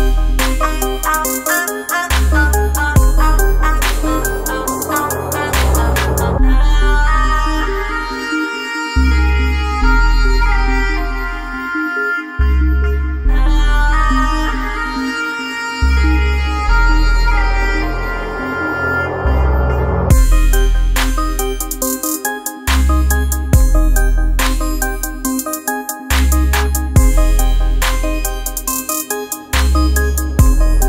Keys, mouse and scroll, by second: 1.7 click, 4.9-17.5 drag, 17.5 ctrl+z, 19.1 click, 24.5 click, 28.5 shift+Num_Lock, 28.5 click.